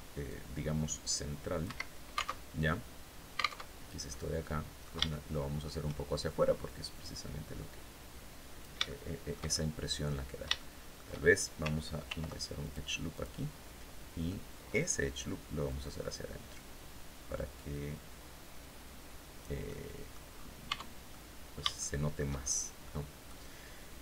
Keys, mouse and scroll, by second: 1.1 Escape, 1.8 alt+Tab, 3.1 alt+Tab, 3.5 middle click, 4.5 shift+middle click, 6.1-8.2 drag, 8.3 shift+middle click, 9.0 shift+scroll up 2, 10.0 shift+middle click, 11.5 ctrl+r, 12.1 ctrl+click, 12.6 ctrl+click, 13.7 middle click, 15.1-19.0 drag, 19.1 click, 20.1 Tab, 20.5-21.8 drag, 21.9 shift+scroll up 2, 22.3 click, 22.3 middle click, 23.5 shift+middle click.